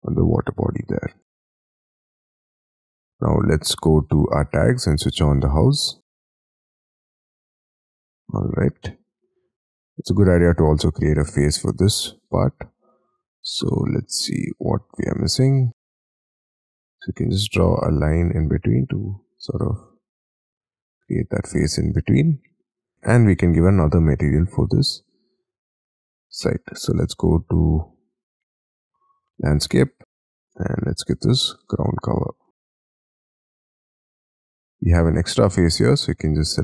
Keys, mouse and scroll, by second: 1.2 space, 7.7 middle click, 10.6 scroll up 4, 12.1-13.0 scroll down 6, 13.1 double click, 14.2-15.7 scroll up 5, 15.8 scroll up 5, 16.5-16.9 scroll down 5, 19.4-20.4 scroll up 13, 20.7 scroll down 6, 20.9 space, 21.6-22.9 scroll down 7, 23.1 scroll down 5, 23.5-27.4 scroll up 6, 32.2 middle click, 32.5 scroll down 4, 32.8 Escape, 33.0 Escape, 33.2-33.9 scroll up 5, 34.4 Escape, 34.8 double click, 35.5-36.6 scroll up 6.